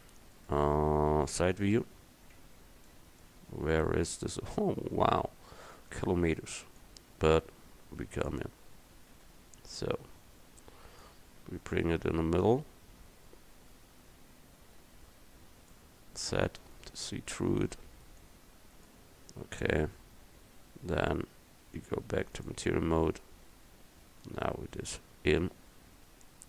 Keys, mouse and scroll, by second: 1.4 KP_3, 6.0 right click, 6.8-9.2 drag, 6.8-8.4 right drag, 9.2 KP_Decimal, 12.7-15.8 drag, 16.4 z, 18.2-20.2 drag, 23.0 middle click, 23.4 middle click, 24.5 Tab, 24.9 Tab, 25.4 a.